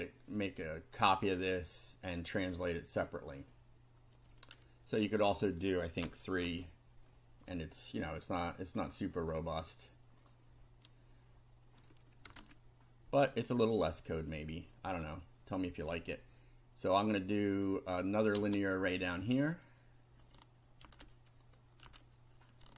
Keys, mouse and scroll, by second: 0.4 click, 5.1 click, 6.0 3, 6.4 F5, 7.1 scroll down 1, 7.5-8.2 drag, 8.2-9.0 scroll up 2, 9.2-9.9 right drag, 10.2 click, 12.3 BackSpace, 12.4 2, 14.2-14.5 scroll down 2, 14.8 right click, 17.6 click, 18.2 click, 18.4 space, 18.9-20.4 drag, 20.8 ctrl+c, 21.5 ctrl+click, 21.9 ctrl+v.